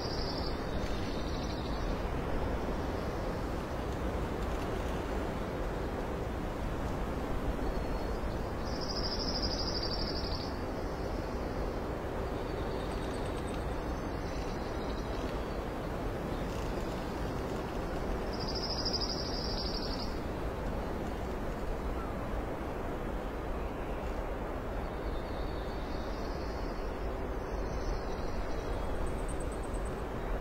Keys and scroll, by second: 0.3 space, 0.8 ctrl+alt+s, 2.8 ctrl+s, 6.7 ctrl+i, 7.5 alt+d, 7.6 alt+x, 8.0-9.7 typing, 10.2 alt+space, 10.7 alt+space, 10.8 alt+x, 11.1 alt+x, 11.6 alt+space, 12.6 alt+space, 13.6 alt+space, 15.8 alt+space, 16.8 space, 17.3 space, 18.2 alt+space, 21.9 alt+x, 23.4 shift+space, 24.0 space, 24.6 alt+space, 25.1 alt+space, 25.7 alt+space, 26.7 space, 27.6 alt+space, 28.2 ctrl+space.